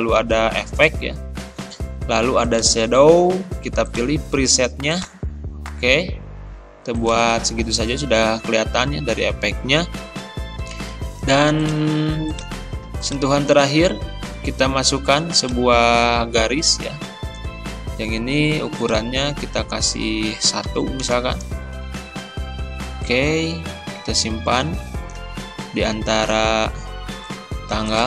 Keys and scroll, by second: 20.7 1.